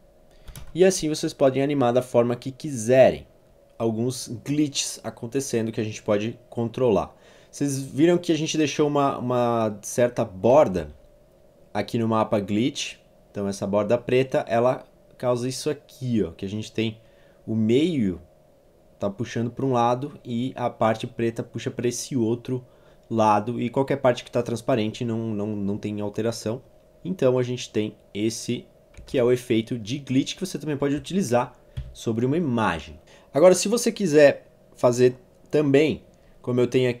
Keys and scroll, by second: 0.5 0, 0.6 Return, 10.8 z, 11.3 v, 29.0 z, 31.9 alt+v.